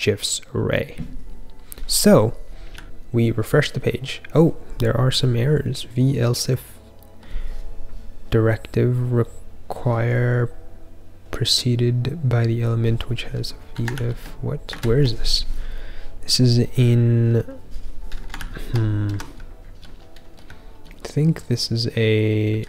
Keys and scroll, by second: 19.3-22.6 typing.